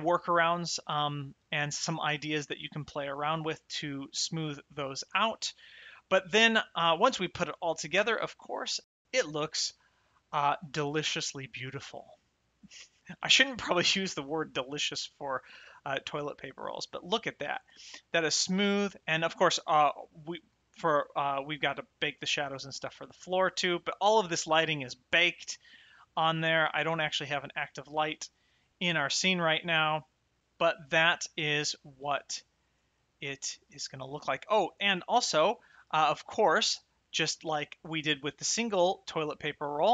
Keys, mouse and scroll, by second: 4.0 shift+middle click, 5.7 shift+middle click, 7.2 click, 7.9 m, 9.9 shift+middle click, 11.2 click, 12.0 shift+middle click, 15.2 shift+right click, 15.9 middle click, 19.9 shift+middle click, 21.1 click, 24.2 shift+middle click, 24.9 middle click, 30.0 middle click, 31.7 shift+middle click, 32.5 shift+right click, 32.9 middle click, 34.7 shift+middle click, 35.9 shift+middle click, 36.8 middle click, 37.6 shift+right click, 37.9 middle click, 38.6 shift+middle click.